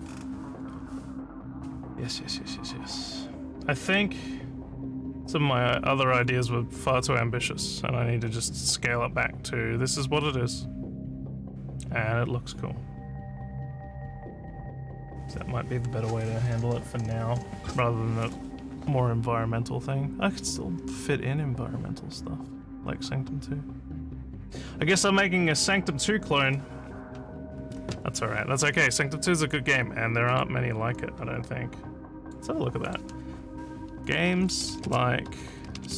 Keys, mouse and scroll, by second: 30.3 click, 32.2 click, 32.8 click, 34.0-35.9 typing.